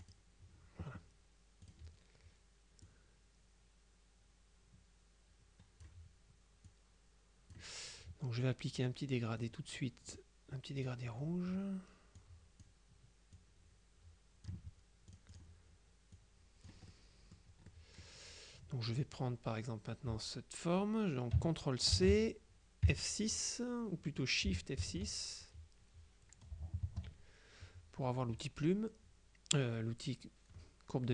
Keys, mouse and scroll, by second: 0.1 click, 1.7 click, 3.0-6.4 drag, 6.8 click, 9.5 click, 10.2 click, 10.9 click, 12.2 click, 13.4-15.0 drag, 15.2 click, 16.2 click, 17.8 middle click, 19.0 click, 22.0 ctrl+c, 22.9 F6, 24.6 Return, 24.9 F6, 26.9 shift+F6.